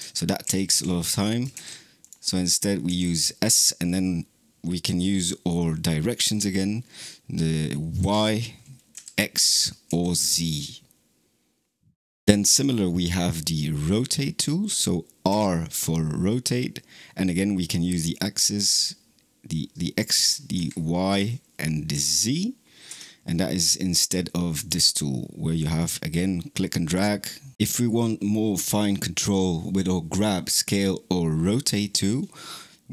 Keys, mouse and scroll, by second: 0.3 ctrl+z, 0.6 ctrl+z, 1.4 ctrl+z, 1.8 click, 2.7 s, 12.0 click, 15.1 r, 25.0-26.3 drag.